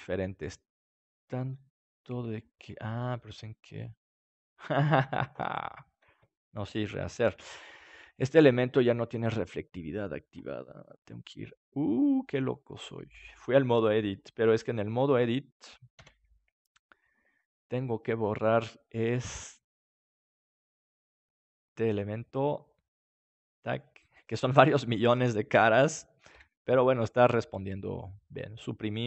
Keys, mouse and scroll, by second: 1.2-3.0 middle drag, 5.2 ctrl+z, 9.8 ctrl+shift+z, 18.6 a, 20.6 b, 27.9 Delete.